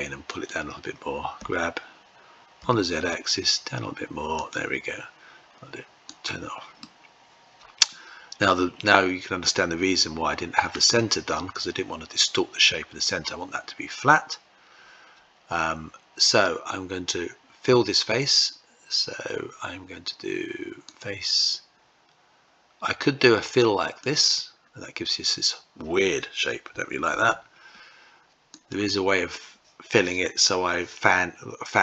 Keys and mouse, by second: 0.0 click, 1.1 g, 5.8 click, 6.5-10.4 middle drag, 20.6-23.9 drag, 23.9 typing, 26.7 ctrl+z, 28.2-31.8 drag.